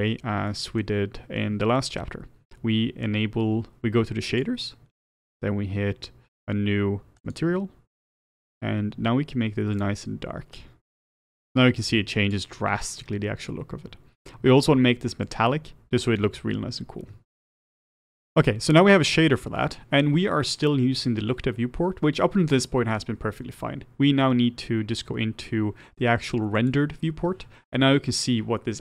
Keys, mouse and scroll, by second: 0.5-7.3 middle drag, 7.3-10.6 drag, 15.3-17.6 drag, 17.6 middle click, 26.6 click.